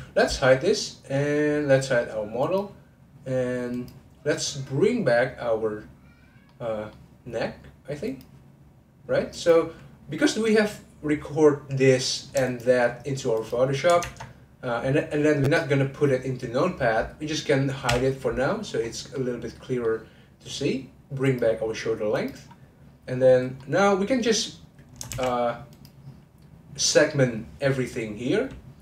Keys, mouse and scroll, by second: 1.2-2.4 middle drag, 2.4 click, 3.7 click, 4.3-5.5 scroll up 1, 6.5-8.0 middle drag, 8.0-9.5 drag, 12.4 shift+click, 14.1 shift+click, 18.5 middle click, 18.8 scroll down 1, 19.1-21.2 middle drag, 21.2 click, 21.6-22.0 scroll up 2, 22.1 click, 22.4-23.2 scroll down 3, 23.6-25.1 middle drag, 25.1 shift+s, 26.9-27.3 scroll up 1.